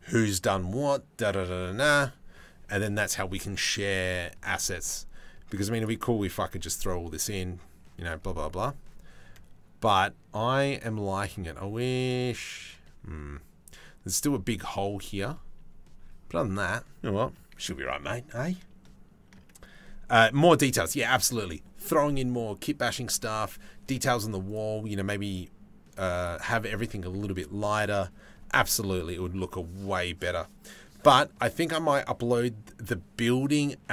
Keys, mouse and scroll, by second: 24.1 click, 25.8 click.